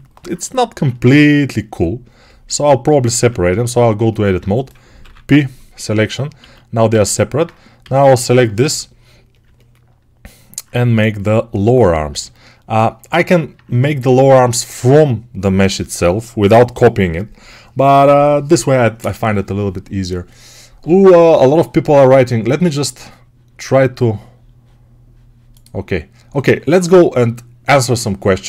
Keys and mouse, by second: 0.1-3.3 right drag, 0.6 6, 3.0 Tab, 4.9 p, 6.3 alt+q, 7.3-9.3 right drag, 7.7 a, 8.5 shift+d, 9.3-11.5 alt+middle drag, 11.5-12.6 right drag, 12.0 g, 12.6-28.4 alt+middle drag.